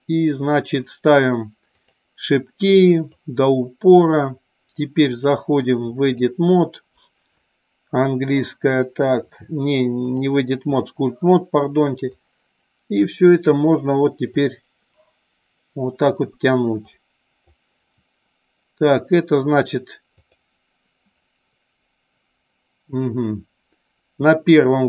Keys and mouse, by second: 2.0 click, 3.2 click, 5.2-6.3 drag, 10.1-11.1 drag, 12.2-13.6 drag, 14.5 click, 17.0 click, 20.4 click.